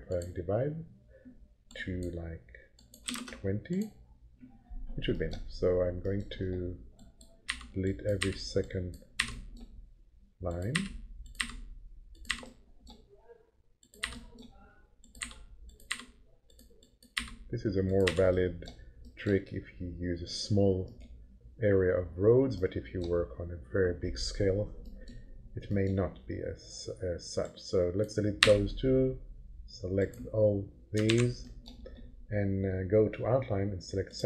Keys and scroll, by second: 2.8-3.7 typing, 7.5 Delete, 10.7 Delete, 14.0 Delete, 15.2 Delete, 17.2 Delete, 28.4 Delete, 31.0 ctrl+a.